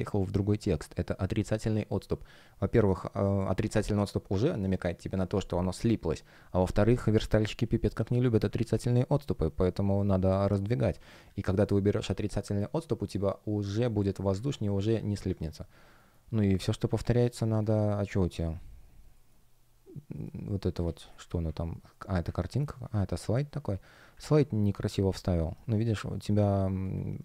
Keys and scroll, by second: 15.1 F1, 15.8 shift+o, 17.0 space, 17.6 shift+o, 19.6-21.4 typing, 22.5 space, 25.3 shift+p.